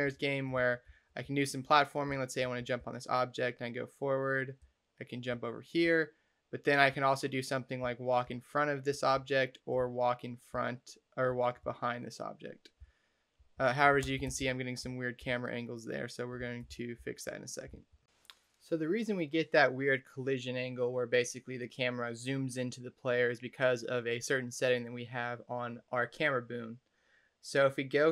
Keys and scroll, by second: 0.0-2.6 typing, 4.5 space, 5.7 a, 7.7-11.4 typing, 12.6-18.1 typing.